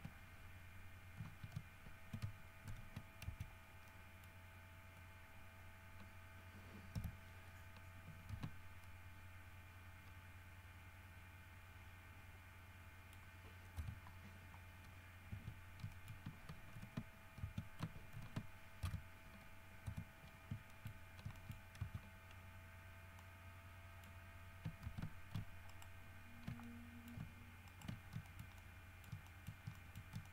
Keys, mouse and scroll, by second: 2.9 shift+n, 3.5 shift+Tab, 4.1 shift+middle click, 7.2 KP_Divide, 8.5 alt+a, 9.0-13.6 alt+middle drag, 14.0 KP_3, 15.0 scroll up 2, 15.5 Tab, 16.1 shift+middle click, 17.0 alt+h, 17.6 alt+Tab, 18.4 alt+h, 19.2 KP_Divide, 20.1 KP_3, 20.9 shift+middle click, 21.2-22.0 shift+scroll up 4, 21.6 shift+middle click, 22.0 shift+Tab, 22.6 shift+scroll up 3, 23.0-23.3 scroll down 2, 23.4-24.4 middle drag, 25.0 alt+a, 25.9 alt+shift+right click, 26.8 alt+shift+middle click, 27.9 alt+shift+middle click, 28.2 alt+shift+scroll down 1, 28.5 alt+shift+middle click, 29.6 shift+middle click, 30.0 shift+middle click.